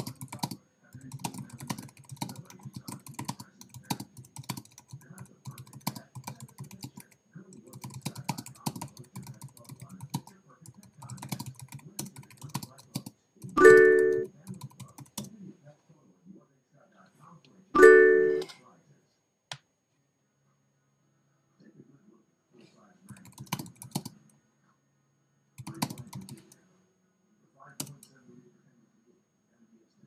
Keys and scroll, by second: 12.0 Return, 15.2 Return, 27.8 Return.